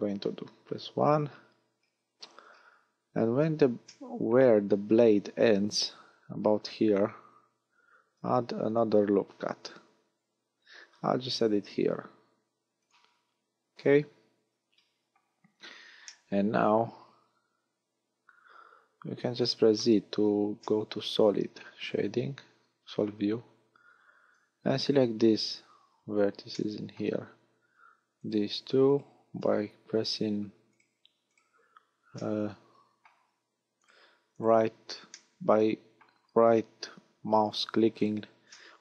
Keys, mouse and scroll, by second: 0.2 KP_1, 2.5-3.2 scroll down 3, 3.2 a, 3.8 shift+middle click, 7.8 ctrl+r, 12.9 click, 13.7 a, 16.1 middle click, 20.0 z, 20.6 middle click, 23.4-25.0 scroll up 1, 25.0 scroll up 1, 26.5 shift+middle click, 28.2 right click, 28.9 shift+right click, 30.7 shift+right click, 31.3 shift+right click, 32.2 middle click, 33.8 shift+right click, 34.4 shift+right click, 35.1 shift+middle click, 37.5 shift+right click, 38.0 shift+right click, 38.5 middle click.